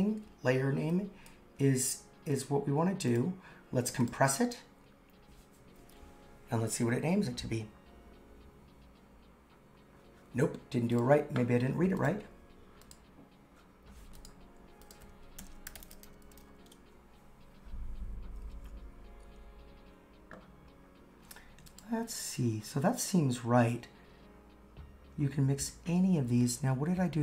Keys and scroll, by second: 15.4 super+/.